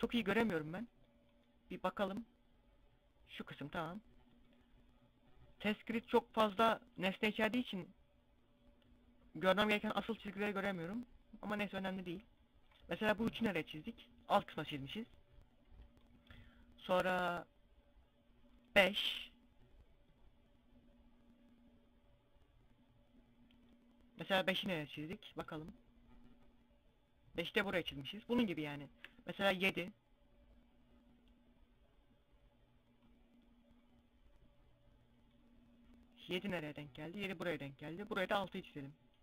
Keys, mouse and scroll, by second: 0.0 click, 3.7 click, 12.6 middle click, 14.3 middle click, 18.1 click, 24.4 middle click, 29.9 click, 33.4 click, 35.5 middle click, 37.7 click.